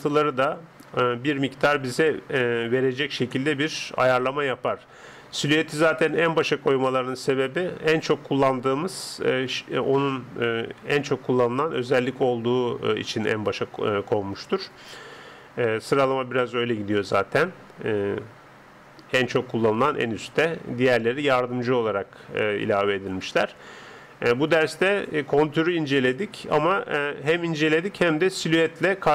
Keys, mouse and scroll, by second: 26.1-29.1 drag.